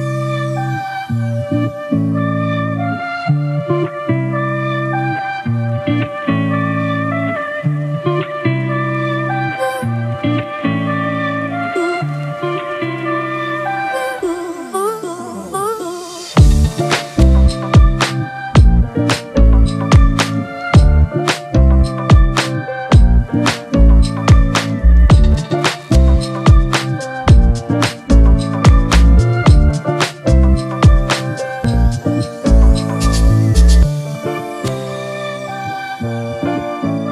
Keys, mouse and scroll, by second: 3.0 double click, 4.8 typing, 5.2 double click, 13.5-16.0 scroll up 1.